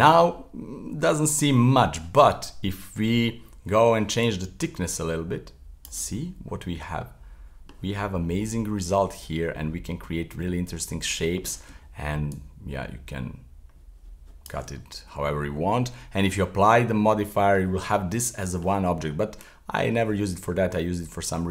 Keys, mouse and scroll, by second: 0.4-0.9 scroll up 1, 0.9-3.9 middle drag, 4.2-6.2 shift+drag, 6.2-8.0 middle drag, 8.0 scroll up 2, 8.2-11.3 middle drag, 12.3-14.8 shift+drag, 14.8-16.9 middle drag, 16.9-17.3 scroll down 1, 17.3-19.4 middle drag, 19.4-21.5 shift+drag.